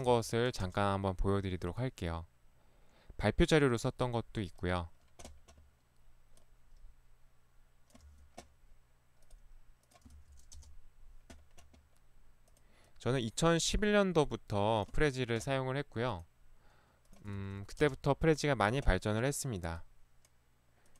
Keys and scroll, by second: 0.1 ctrl+v, 0.7 Return, 8.1 ctrl+c, 10.5 ctrl+v, 10.5 Return, 15.0 ctrl+c, 17.4 ctrl+v, 17.8 Return.